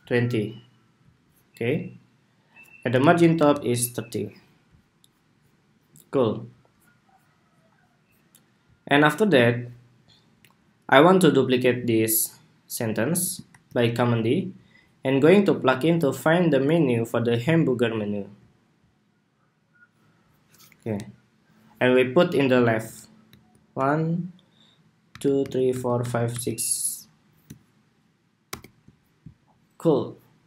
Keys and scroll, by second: 2.9 alt+Down, 3.1 alt+Down, 3.2 alt+Down, 13.3 super+d, 28.2 alt+Right.